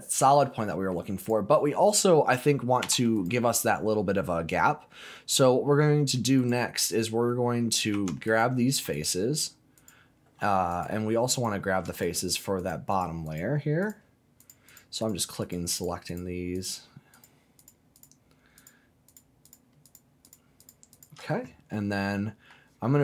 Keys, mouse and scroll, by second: 0.4 middle click, 1.2 click, 2.8 4, 3.1 click, 5.7 middle click, 6.4 click, 7.9 3, 8.2 click, 8.9 alt+click, 9.7 alt+click, 10.7 click, 11.3 click, 11.9 shift+click, 12.2 alt+shift+click, 12.6 alt+shift+click, 12.9 shift+click, 13.2 shift+click, 13.8 shift+click, 14.4 shift+click, 14.6 shift+click, 15.0 shift+click, 15.4 shift+click, 15.7 shift+click, 16.0 shift+click, 16.5 shift+click, 17.1 shift+click, 17.5 shift+click, 17.9 shift+click, 18.5 shift+click, 19.1 shift+click, 19.4 shift+click, 19.8 shift+click, 20.2 shift+click, 20.6 shift+click, 20.9 shift+click, 21.7 middle click.